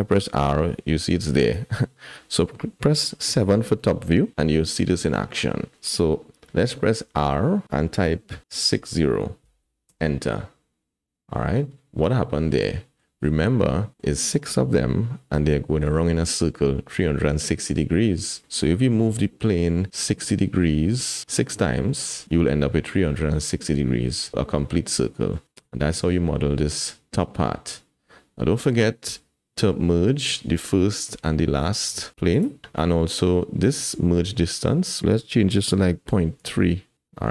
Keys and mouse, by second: 0.3 r, 4.1 KP_7, 5.1 shift+middle drag, 7.0 r, 11.1-13.0 drag, 13.9 click, 18.3 middle click, 24.6-25.3 middle drag, 25.5 KP_1, 27.7-28.7 middle drag, 32.3 click, 35.0-36.9 drag.